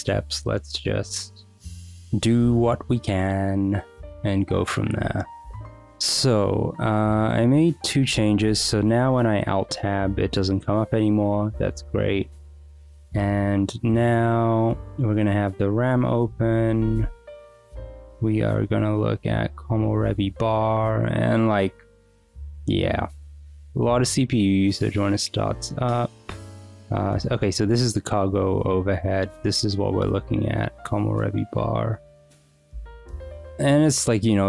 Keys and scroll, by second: 8.7 alt+Tab.